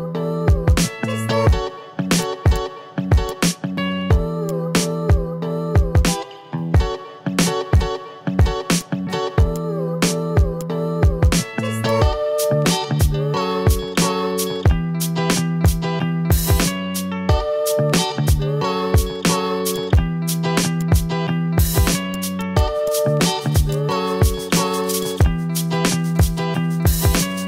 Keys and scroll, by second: 6.4 ctrl+z, 7.0 ctrl+z, 7.9 t, 17.9 ctrl+z, 19.5 ctrl+z, 21.0 ctrl+z, 24.8 v, 26.1 ctrl+z.